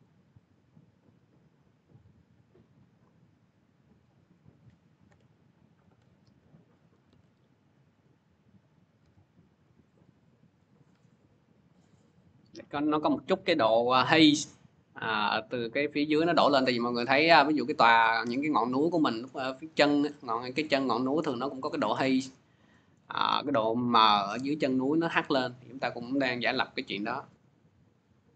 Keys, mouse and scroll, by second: 0.3 scroll, 2.4 click, 4.3 click, 4.9 m, 4.9-5.3 scroll, 5.6 click, 6.1 ctrl+c, 6.7 click, 6.9 ctrl+v, 7.7 click, 8.8 m, 9.5 middle click, 10.4 click, 11.6 click, 11.7-12.2 scroll, 16.3 scroll, 17.5-17.9 scroll, 18.2-18.8 scroll, 18.8-19.6 scroll, 20.4 scroll, 21.1 scroll, 21.8-22.2 scroll, 22.8 scroll, 23.5-23.9 scroll, 24.2 scroll down 1, 25.7-27.8 scroll up 1, 28.0 click, 28.0 scroll down 1.